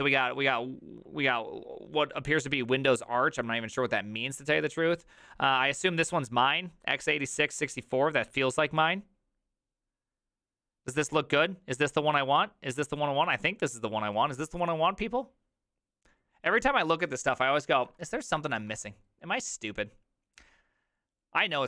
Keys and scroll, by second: 17.9 alt+f, 18.5 alt+f.